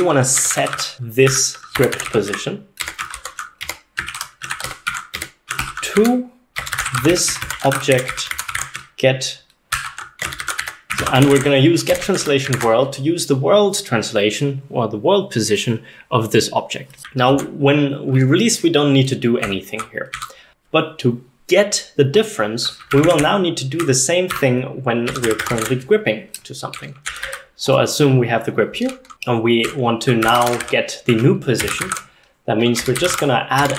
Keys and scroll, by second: 0.0-12.6 typing, 2.9 Escape, 4.2 ctrl+o, 5.2 Escape, 12.6 ctrl+s, 17.3 j, 17.4 j, 17.4 j, 19.2-21.0 typing, 22.7-27.8 typing, 29.1-33.7 typing.